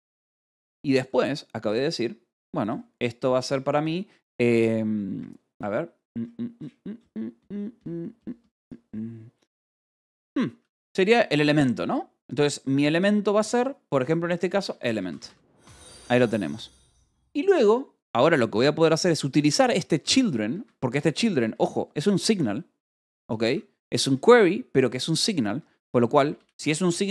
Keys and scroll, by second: 0.0-0.9 typing, 3.0 shift+c, 3.3 BackSpace, 14.4-16.0 typing, 17.4 Return, 19.3 Escape, 19.7 k, 20.4 Escape, 21.3 k, 21.8 j, 22.3 /, 23.3 Escape, 23.5-27.1 typing, 24.8 Escape.